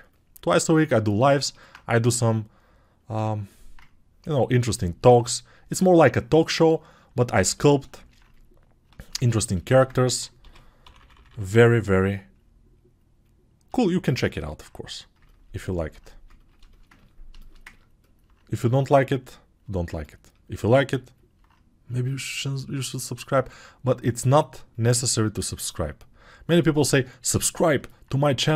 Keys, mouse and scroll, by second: 2.1 ctrl+1, 7.5 ctrl+alt+2.